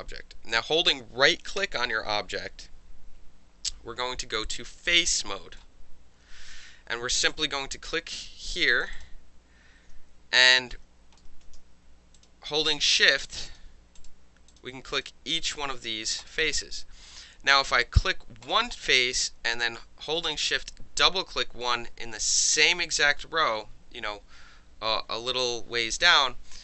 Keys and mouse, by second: 1.6-5.6 right drag, 7.3 click, 8.8 shift+click, 8.9 shift+click, 10.3 ctrl+z, 10.6 ctrl+z, 11.3 ctrl+z, 12.2 shift+click, 13.0 shift+click, 13.5 shift+click, 14.0 shift+click, 14.5 shift+click, 14.9 shift+click, 15.0-16.2 shift+middle drag, 15.5 shift+click, 16.2 shift+click, 16.3-18.4 shift+middle drag, 18.4 shift+click, 18.5-26.6 shift+middle drag.